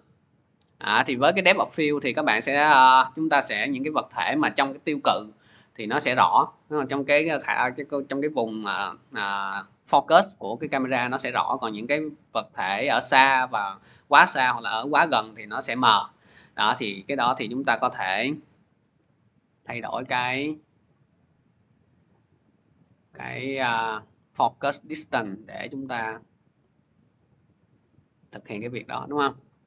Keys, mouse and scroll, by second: 1.0 click, 2.1 scroll, 7.2-7.7 scroll, 22.6-27.7 drag, 28.8 click.